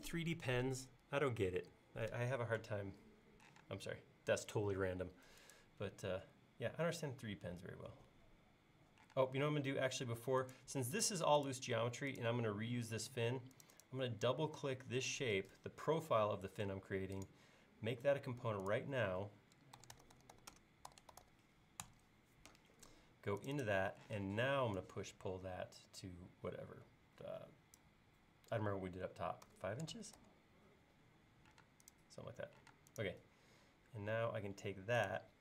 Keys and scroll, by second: 3.5 p, 9.2 space, 19.6-21.8 typing, 24.1 p, 29.5-30.2 typing, 32.8 space.